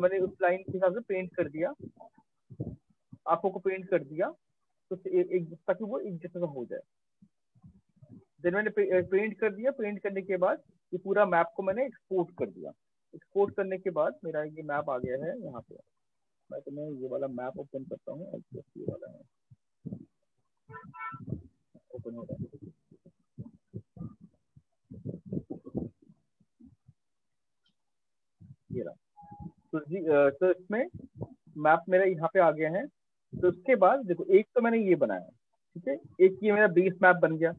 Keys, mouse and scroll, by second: 0.4 click, 1.5 click, 2.3 click, 5.6 ctrl+-, 6.2 ctrl+-, 6.6 ctrl+-, 6.9 ctrl+-, 7.4 ctrl+-, 7.7 ctrl+-, 8.3 ctrl+-, 9.6-10.5 click, 13.7 click, 18.1 click, 20.8 click, 29.0 ctrl+click, 29.4 ctrl+click, 29.5 ctrl+click, 30.3 click, 30.6 ctrl+click, 30.8 ctrl+click, 31.2 ctrl+click, 32.2 click, 33.4 click, 35.1 ctrl+-, 35.4 ctrl+-, 35.7 ctrl+-, 36.0 ctrl+-, 36.2 ctrl+-, 36.4 ctrl+-, 36.8 ctrl+-.